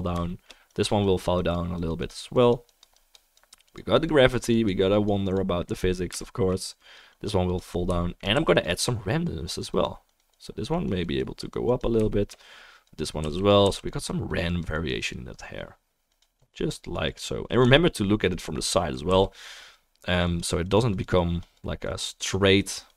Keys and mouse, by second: 8.0-8.6 shift+drag, 8.0-18.5 shift+middle drag, 8.0-22.9 shift+right drag, 8.6 f, 9.1-13.5 drag, 13.2 f, 13.6 f, 14.1-19.4 drag, 19.1 f, 20.2-22.9 drag.